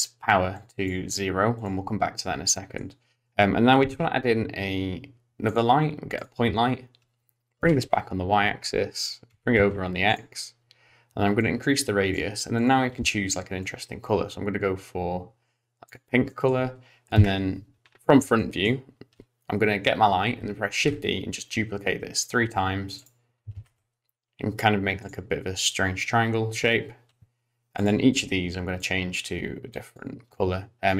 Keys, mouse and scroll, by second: 0.6 click, 1.5 click, 2.5 middle click, 3.8 shift+a, 7.6 g, 9.3 g, 11.4 click, 12.5 click, 16.3 middle click, 17.1 KP_1, 17.8-18.4 scroll up 3, 18.4 shift+middle click, 20.8 shift+d, 23.5 shift+d, 27.8 click.